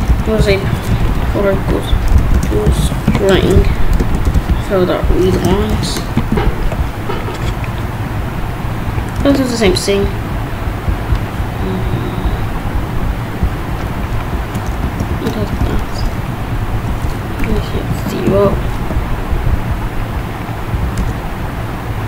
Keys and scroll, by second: 0.4 s, 1.5 ctrl+s, 2.2 Left, 2.6 space, 2.6 s, 3.4 shift+9, 4.2 Right, 4.3 BackSpace, 5.9 shift+0, 6.8 ctrl+b, 9.4 Return, 14.8 Left, 16.9 [, 17.8 0, 18.6 ctrl+b, 21.0 Return.